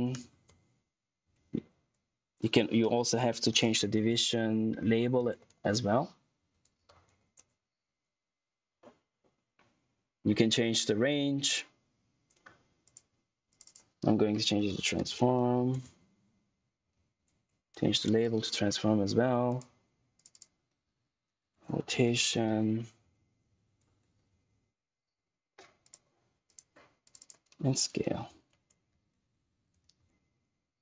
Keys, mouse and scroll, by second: 0.0-0.9 typing, 1.3 ctrl+a, 1.7 Tab, 2.8-7.5 typing, 12.7 click, 13.9-16.3 typing, 16.6 ctrl+a, 16.9 ctrl+c, 17.2 Tab, 17.7 ctrl+v, 18.5 Tab, 19.4 click, 20.9-22.9 typing, 23.1 ctrl+a, 23.4 ctrl+c, 23.8 Tab, 24.2 ctrl+v, 25.7 click, 27.3-30.5 typing.